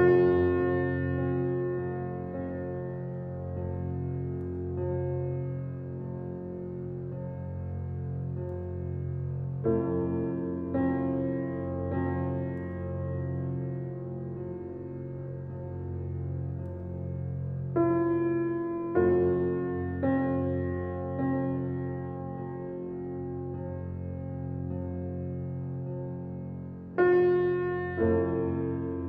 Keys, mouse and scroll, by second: 2.6 click, 3.5-3.8 shift+middle drag, 3.8-4.2 scroll up 1, 4.2-5.8 shift+middle drag, 5.8-7.3 scroll up 5, 6.0-6.3 shift+middle drag, 7.3-7.8 shift+middle drag, 7.8 click, 8.8 Tab, 9.2-9.6 scroll up 1, 9.6 click, 10.5 Tab, 10.9 click, 11.7 Tab, 13.1-14.9 drag, 15.7-17.3 drag, 17.3 KP_0, 18.3 click, 20.8-23.4 drag, 23.8 Tab, 25.0 drag, 25.8 click, 26.6-28.2 scroll down 2, 28.2 click.